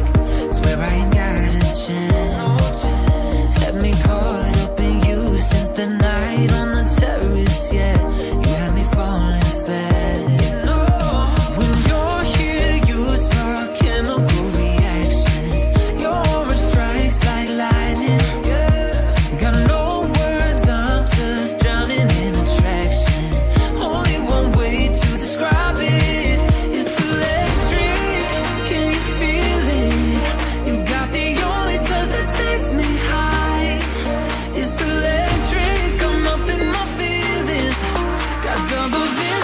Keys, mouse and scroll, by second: 6.2 double click, 6.7 click, 18.0 click, 19.2 double click, 21.6 click, 22.0-22.4 scroll up 1, 22.9-23.4 scroll down 1, 23.4 click, 29.6 click, 30.2 scroll up 1, 30.6 scroll down 1, 31.9 click, 34.7 click.